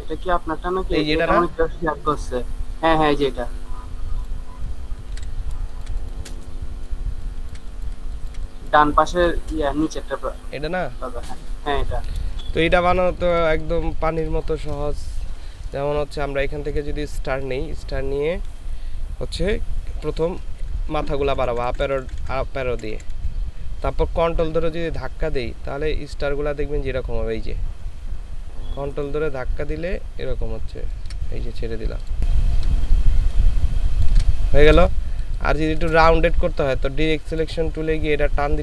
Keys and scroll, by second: 5.2 ctrl+v, 5.6 ctrl+space, 7.2 ctrl+space, 8.8 ctrl+space, 12.4 ctrl+space, 20.6 Up, 20.9 Up, 21.1 Up, 21.2 Up, 21.3 Up, 21.5 Up, 21.7 Up, 21.9 Up, 22.0 Up, 22.7 Down, 22.9 Down, 35.1 ctrl+space.